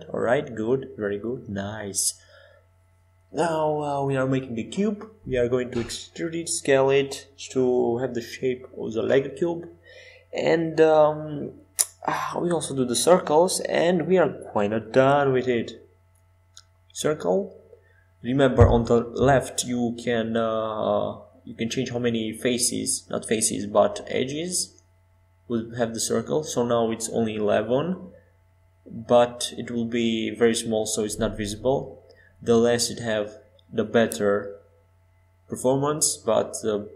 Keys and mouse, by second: 3.7 s, 7.1 middle click, 13.4-15.3 drag, 14.2 shift+a, 18.2-20.3 middle drag, 20.3-23.7 drag, 26.2-28.1 drag, 28.1 middle click, 28.5 Tab, 30.6 f, 31.6 e, 33.8 Tab, 35.6-36.9 drag, 36.2 s.